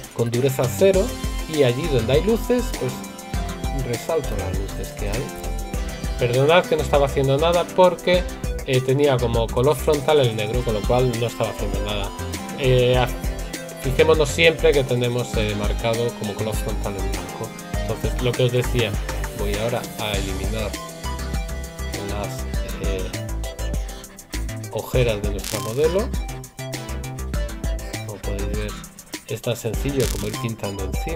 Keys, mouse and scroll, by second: 0.9 right click, 4.1 right click, 5.5 right click, 22.6 right click.